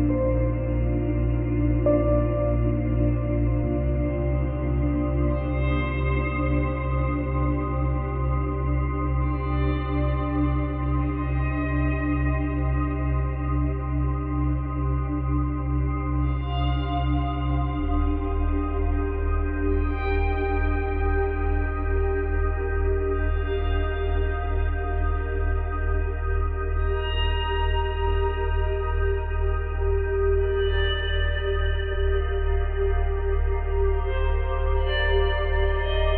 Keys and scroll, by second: 9.3 space, 26.9 ctrl+z, 33.5 space, 34.2 space.